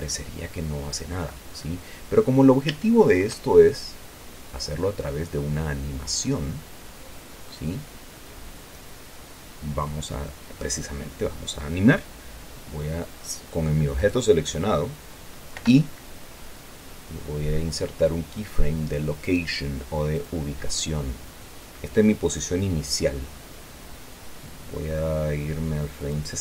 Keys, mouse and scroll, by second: 3.1 shift+click, 3.9-8.0 shift+drag, 14.3 right click, 15.9 i, 20.5 click, 26.3 click.